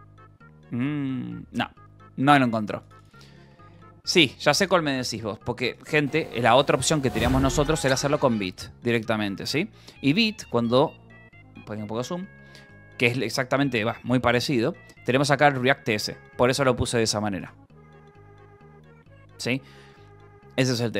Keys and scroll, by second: 4.0-5.4 typing, 11.8 ctrl+=.